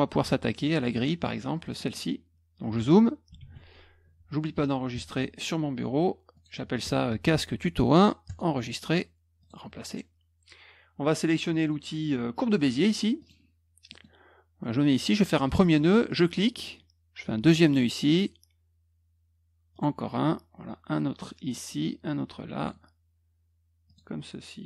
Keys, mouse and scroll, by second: 1.5 middle click, 1.6 middle click, 1.8 middle click, 1.8 scroll up 2, 3.3 ctrl+s, 6.3 click, 8.2 click, 9.4 click, 13.2 click, 13.9 middle click, 16.0 click, 17.6 click, 19.7 click, 21.4 click, 22.5 click, 23.8 click.